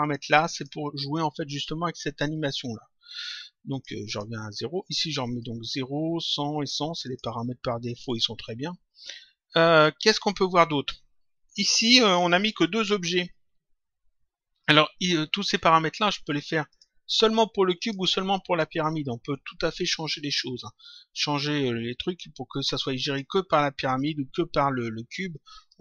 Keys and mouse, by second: 0.0 click, 3.6 click, 5.6 click, 7.0 click, 16.7 click, 17.7 click, 21.3 click, 22.6 click.